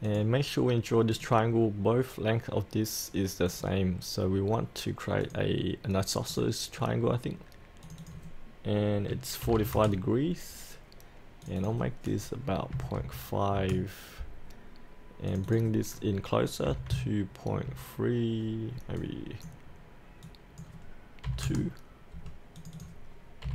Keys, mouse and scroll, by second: 6.8-7.8 scroll down 1, 7.8 click, 9.4 KP_4, 9.5 KP_5, 11.4 click, 13.0 KP_5, 15.3 click, 16.7 KP_2, 17.7 KP_3, 19.0-21.3 drag, 21.3 KP_2, 22.6 click, 23.4 KP_2.